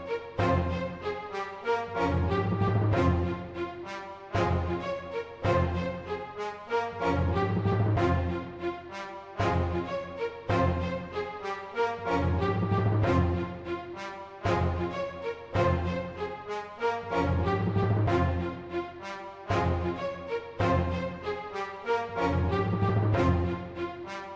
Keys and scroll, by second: 4.8 typing, 5.8 super+z, 6.9 super+z, 9.0 z, 12.4 super+z, 15.9 m, 17.3-18.0 typing.